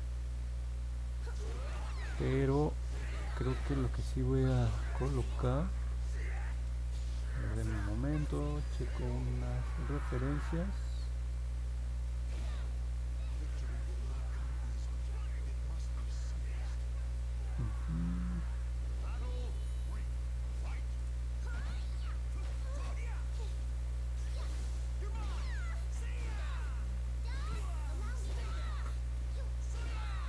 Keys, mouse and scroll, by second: 4.5 scroll down 1, 5.0 scroll up 1, 5.6 alt+middle click, 6.8-7.4 scroll down 2, 7.7 middle click, 8.2 middle click, 8.8 middle click, 9.4 middle click, 10.5 middle click, 11.8-13.3 middle drag, 13.8-14.9 middle drag, 15.2 middle click, 16.5-17.6 middle drag, 18.1 middle click, 19.1 middle click, 20.1 middle click, 20.9 right click.